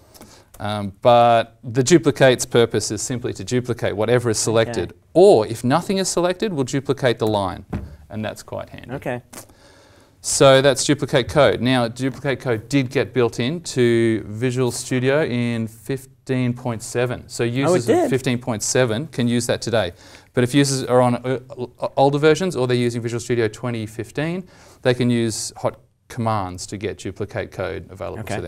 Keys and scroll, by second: 0.2 ctrl+shift+v, 4.0 ctrl+z, 4.7 ctrl+z, 7.2 ctrl+d, 10.5 ctrl+z.